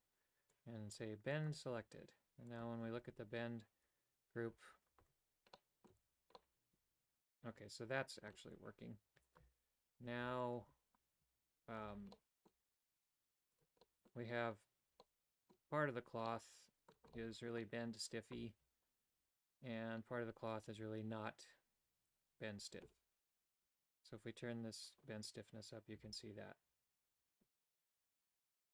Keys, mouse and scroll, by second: 0.5 click, 1.3 click, 2.5 click, 3.1 Tab, 5.0 Tab, 5.6 middle click, 5.9 a, 6.3-8.3 middle drag, 9.3 alt+right click, 10.4 alt+right click, 11.7 alt+right click, 12.1 middle click, 12.5 g, 13.8 middle click, 15.0 middle click, 16.2 middle click, 17.1 middle click, 24.9-28.7 drag.